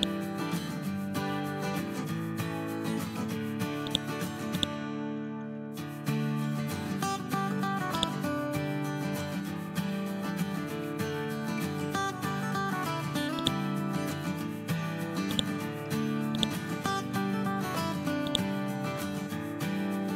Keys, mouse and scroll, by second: 2.4-2.7 scroll up 1, 3.8-6.0 drag, 8.2-13.6 shift+drag, 13.3 shift+right click, 15.3-20.1 drag.